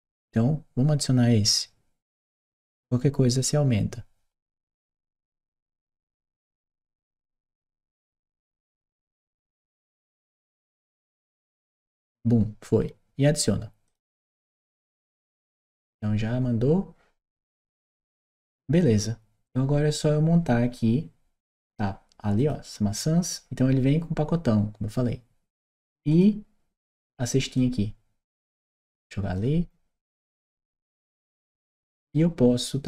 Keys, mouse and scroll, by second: 2.1 click, 13.7 click, 17.9 click, 22.2 click, 25.9 click, 27.4-29.2 drag, 30.3 click, 30.8-31.9 right drag.